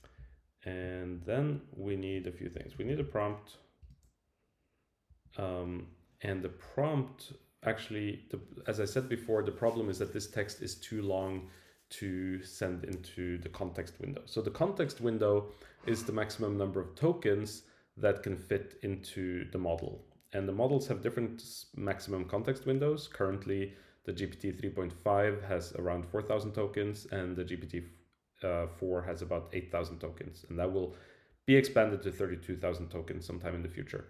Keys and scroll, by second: 3.8 Return, 5.1 Right.